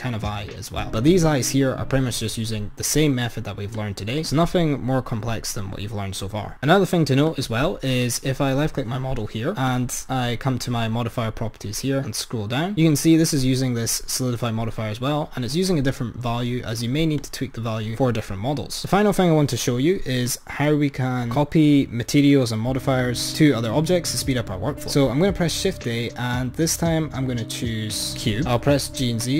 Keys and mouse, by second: 0.0-1.5 drag, 3.9-6.5 drag, 7.4-8.0 drag, 9.7 click, 11.9-14.0 drag, 17.3-20.6 drag, 21.4 click, 26.1 shift+a, 28.6 g.